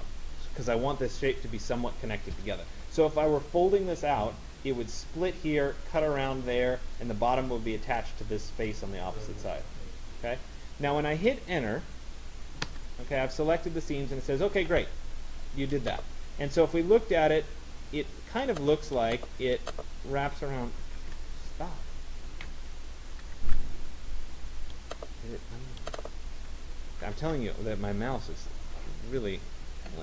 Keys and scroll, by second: 12.4 Return, 20.6 ctrl+z, 22.6 Escape, 23.5 ctrl+z.